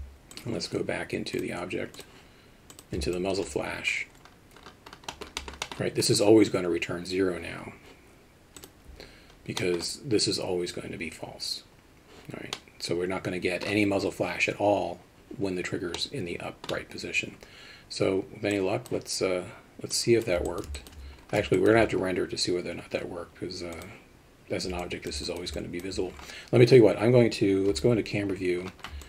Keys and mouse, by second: 0.3 click, 1.4-2.0 drag, 2.8 click, 3.2 alt+shift+middle click, 5.1 middle click, 5.5 middle click, 5.7 middle click, 8.6 click, 9.7 middle click, 12.6-13.6 middle drag, 16.0-16.7 middle drag, 18.7 click, 20.0 click, 20.5 alt+middle click, 20.8 alt+shift+middle drag, 21.6 alt+shift+middle click, 23.8 drag, 24.8 alt+middle click, 25.3 shift+middle drag, 25.6 alt+middle click, 27.7 KP_0.